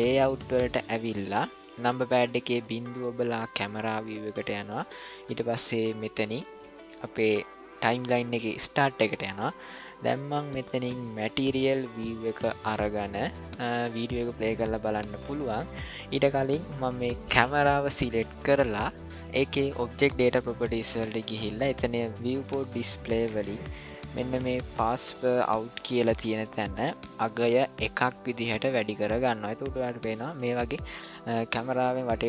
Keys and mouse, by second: 0.0 click, 2.5 KP_0, 4.0-4.6 shift+middle drag, 8.2-11.3 drag, 13.2 ctrl+middle click, 27.4-29.3 drag.